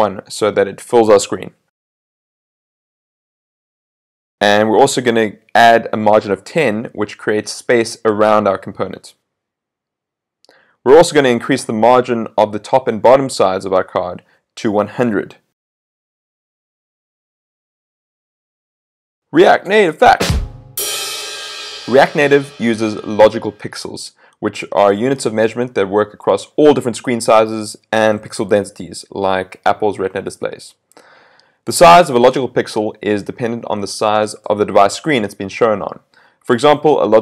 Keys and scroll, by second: 3.7 super+s, 9.3 super+s, 13.5 super+s, 17.5 super+s.